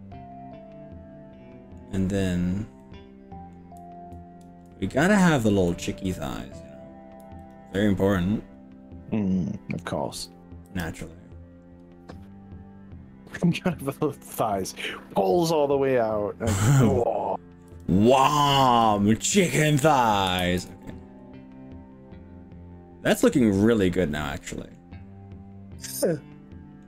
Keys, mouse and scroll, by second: 2.2 scroll up 3, 2.8-3.6 middle drag, 5.2 click, 5.7-6.8 middle drag, 7.4 ctrl+click, 10.1 KP_3, 10.7 g, 14.2 click, 14.6-17.6 middle drag, 17.7 g, 18.7 click, 19.6-20.1 scroll down 3, 20.4 ctrl+z, 20.8-24.8 middle drag, 25.0-26.0 scroll up 4, 26.0-26.8 middle drag.